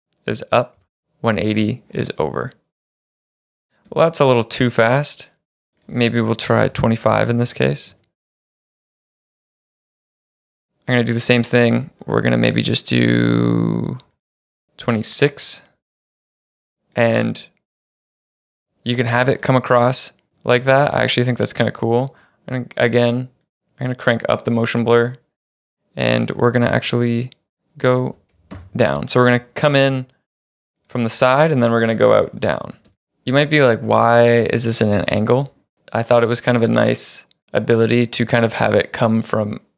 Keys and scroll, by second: 0.8 1, 0.9 Return, 2.9 space, 3.9 space, 6.3-7.9 typing, 32.9 space.